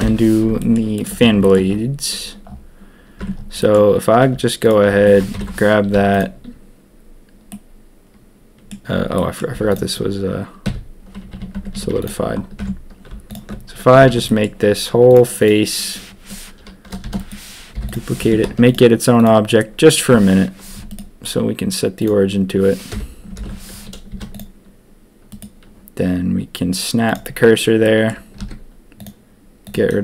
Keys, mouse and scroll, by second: 0.5 shift+click, 0.9 shift+drag, 1.4 shift+drag, 3.2 Tab, 3.5 click, 4.6 alt+click, 5.3 ctrl+KP_3, 5.9 z, 7.5-8.7 drag, 9.1 click, 9.5 z, 10.6-11.8 typing, 11.5 Tab, 12.0 click, 12.6 Tab, 13.2 alt+click, 13.9 a, 14.0 a, 14.2 click, 15.1 click, 15.4 click, 17.0 shift+d, 17.7 p, 18.2 Tab, 18.4 z, 19.1 click, 20.8-22.0 drag, 22.9 KP_1, 24.1 z, 25.3-27.1 drag, 27.1 right click, 27.8 click.